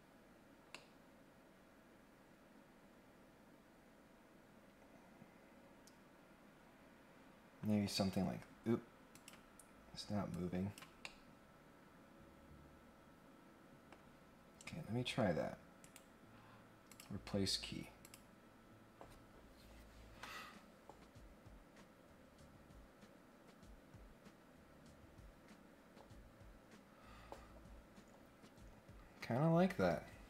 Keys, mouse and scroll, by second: 0.7-1.7 middle drag, 7.1 middle click, 9.1 click, 10.3 click, 11.0-13.9 middle drag, 14.5 scroll up 3, 15.8 right click, 16.9 click, 18.0 click.